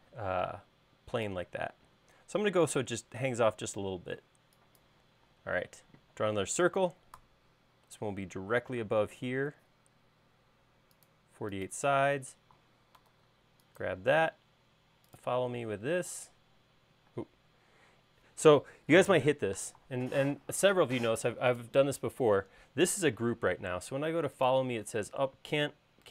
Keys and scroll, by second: 4.1 e, 5.4 space, 7.2 c, 9.2 Up, 12.0 space, 13.2 super+s, 17.2 space.